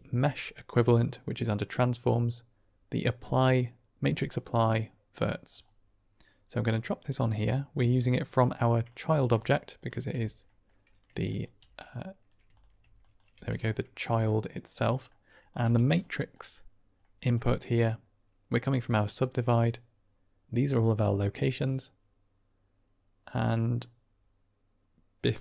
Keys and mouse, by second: 7.3-8.8 drag, 9.7 ctrl+shift+click, 10.4 middle click, 11.2 ctrl+click, 12.9 click, 13.2 g, 13.9 drag, 14.9 click, 15.6 g, 16.3 click, 17.0 middle click, 17.4 middle click, 18.4-25.4 drag.